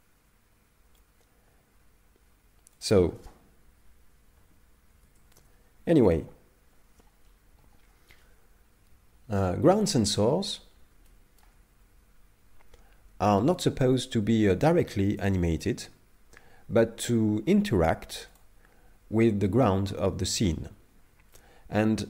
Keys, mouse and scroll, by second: 2.8 click, 11.1 shift+middle click, 13.6 click, 18.3 click.